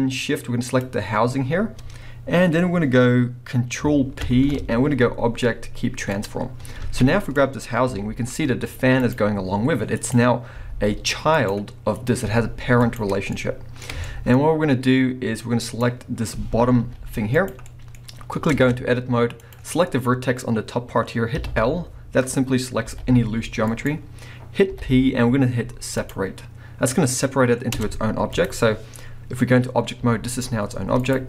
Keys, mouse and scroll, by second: 0.7 shift+click, 4.2 ctrl+p, 6.8 alt+a, 7.2 click, 7.5 scroll down 1, 7.9 g, 9.1 right click, 9.2-9.9 scroll up 1, 10.0 click, 10.6 g, 11.1 middle click, 11.5 right click, 12.0 click, 12.3 g, 12.9 right click, 13.3-15.7 middle drag, 14.0-14.6 scroll up 3, 15.7 click, 16.8 g, 17.5 right click, 17.7-18.5 middle drag, 18.1-18.5 scroll up 2, 18.5 Tab, 19.4 click, 21.4 l, 22.9 g, 23.8 right click, 24.7 p, 27.0-27.7 scroll down 1, 27.7 Tab, 28.3 click, 28.7 scroll down 1, 30.0 g, 31.1 right click.